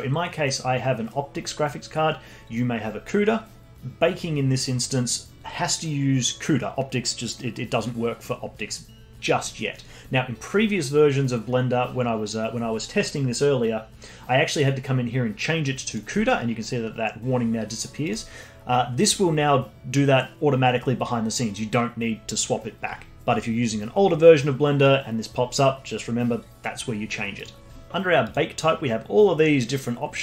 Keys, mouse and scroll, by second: 28.2-30.2 drag.